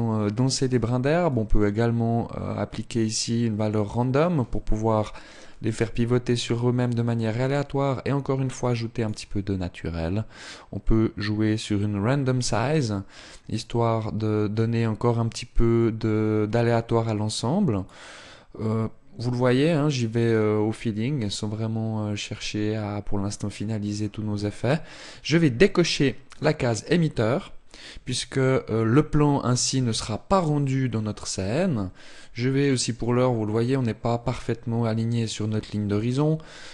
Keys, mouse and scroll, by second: 0.9 click, 6.0 click, 10.0 click, 19.9 click, 25.9 click, 31.7 click, 36.6 n.